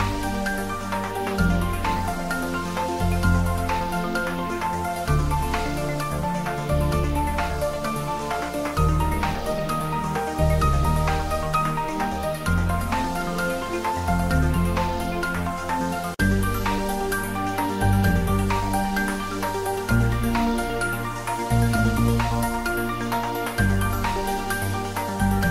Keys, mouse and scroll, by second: 0.6 click, 1.3 ctrl+middle click, 1.7 middle click, 4.3 middle click, 4.9 click, 8.4 middle click, 8.8 click, 10.2 middle click, 10.8 click, 12.3 click, 13.8 click, 14.2 ctrl+s, 14.5 shift+middle click, 15.0 click, 16.7-18.4 middle drag, 19.2 click, 20.9 click, 24.2 click, 24.5 ctrl+s, 24.8 click.